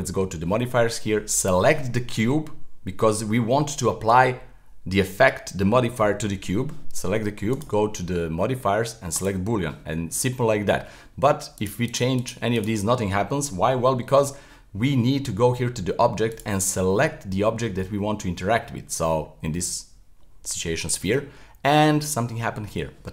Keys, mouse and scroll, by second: 1.4 right click, 7.5-10.6 drag, 11.6 click, 11.9 click, 12.2 click, 12.6 click, 16.3 click, 21.4-23.1 middle drag.